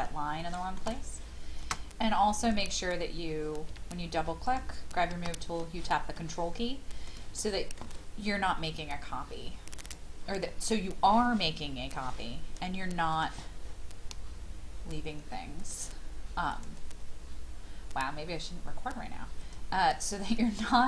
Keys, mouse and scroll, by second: 0.4 shift+middle click, 1.0-1.6 scroll down 1, 2.4 click, 3.7 m, 4.4 click, 6.2 middle click, 7.4 shift+middle click, 8.3-9.8 scroll up 1, 9.8 click, 10.2-12.9 scroll up 1, 13.1 click.